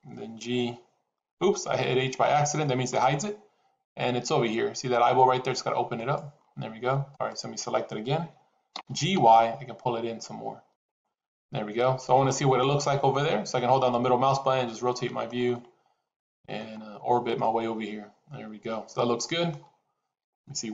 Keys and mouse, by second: 0.4 h, 5.9 click, 7.0 click, 8.6 g, 12.1-15.2 middle drag, 15.5-16.5 middle drag, 17.3-19.5 middle drag.